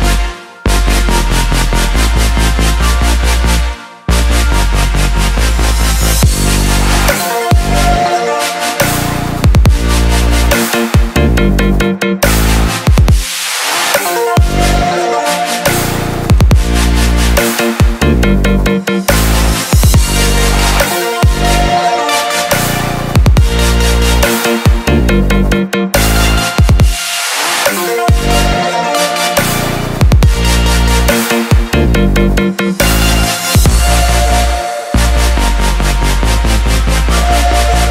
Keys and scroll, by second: 0.0-1.5 typing, 2.0 Return.